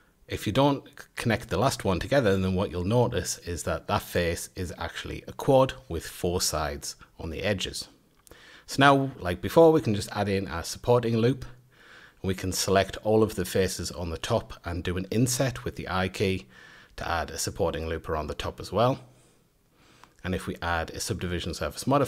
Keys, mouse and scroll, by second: 0.4 click, 1.5 j, 2.4-3.1 middle drag, 3.1-3.6 scroll up 3, 3.6 middle click, 4.1-4.5 scroll up 1, 4.5 2, 5.1 click, 5.5 drag, 5.9 click, 6.3 click, 6.5 scroll down 1, 6.8-7.7 shift+middle drag, 7.7 ctrl+r, 11.2 3, 11.5 click, 12.4 shift+g, 18.4 Tab, 20.1 Tab, 21.0 Tab, 21.3-21.7 middle drag, 21.7-22.0 right drag.